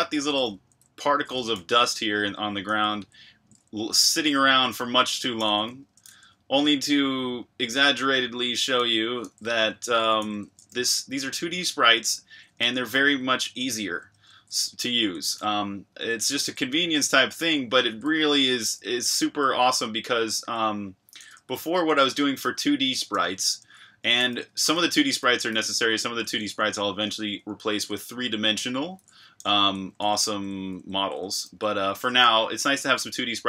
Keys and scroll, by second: 0.0-7.4 typing, 11.4-13.6 typing, 14.6-19.3 typing, 20.6-21.3 typing, 22.6-23.8 typing, 25.5-33.4 typing.